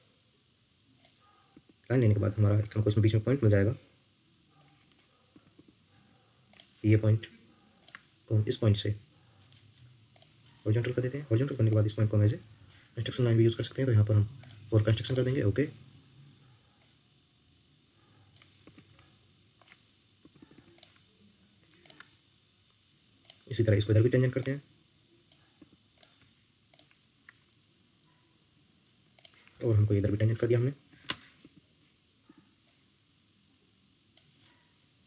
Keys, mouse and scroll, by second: 1.5 Escape, 2.6 Escape, 4.7 scroll down 1, 5.5 Escape, 7.8 shift+click, 11.0 Escape, 18.6 Escape, 18.9 ctrl+middle click, 20.4 Escape, 20.5 Escape, 21.8 shift+click, 23.8 Escape, 25.6 Escape, 26.7 shift+click, 31.4 Escape, 32.2 Escape.